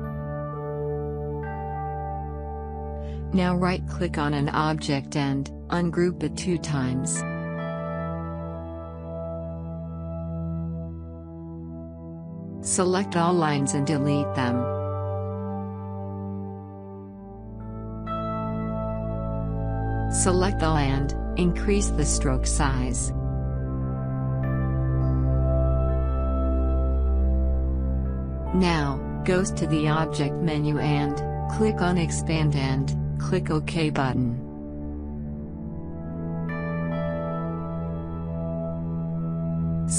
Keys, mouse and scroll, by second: 5.5 right click, 7.0 click, 8.4 right click, 10.3 click, 15.4-20.5 drag, 21.0-24.6 drag, 24.6-24.9 scroll up 1, 31.7 click, 31.7 click, 35.4 click.